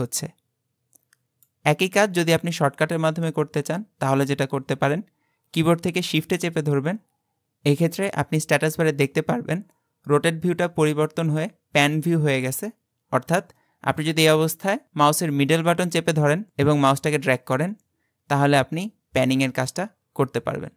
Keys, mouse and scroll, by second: 16.0-18.6 shift+middle drag.